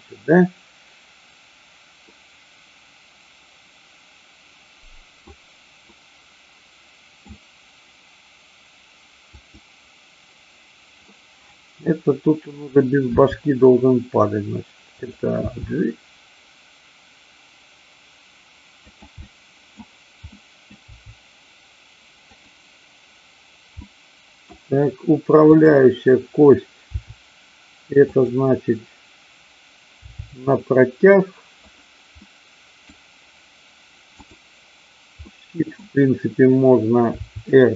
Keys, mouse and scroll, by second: 2.1-5.2 middle drag, 5.8-7.1 middle drag, 9.3-10.3 drag, 11.1-12.4 middle drag, 13.1 r, 15.0 click, 15.4 g, 18.8 click, 19.2 middle click, 20.3 middle click, 21.0 g, 22.3 click, 23.8-24.6 middle drag, 25.6 click, 27.0 r, 28.1 click, 30.0 g, 31.6 click, 32.2-33.0 middle drag, 34.2-34.6 drag, 35.3 middle click, 37.1 r.